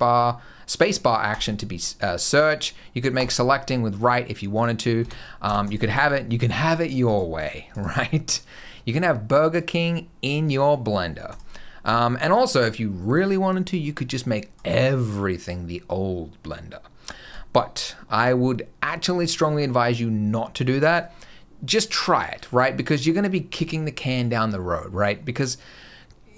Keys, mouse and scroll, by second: 4.4 click, 4.9 space, 6.9 right click, 7.6 right click, 9.4 click.